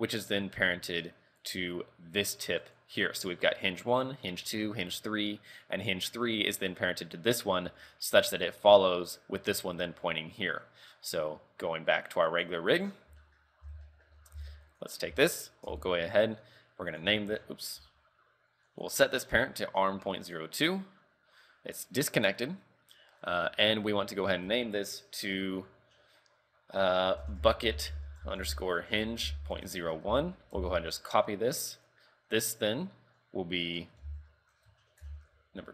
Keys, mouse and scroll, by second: 0.9 right click, 1.5 right click, 2.3 right click, 2.7 right click, 12.0 click, 12.4 click, 12.9-13.3 scroll down 6, 13.3 shift+middle click, 13.6 scroll up 6, 13.7 z, 14.0 shift+middle click, 14.2 scroll up 2, 14.5 z, 14.8 right click, 15.3 shift+middle click, 15.8 Tab, 17.0 click, 18.8 click, 23.2 scroll up 6, 24.3 click, 30.7 ctrl+c, 31.8 right click, 33.7 click.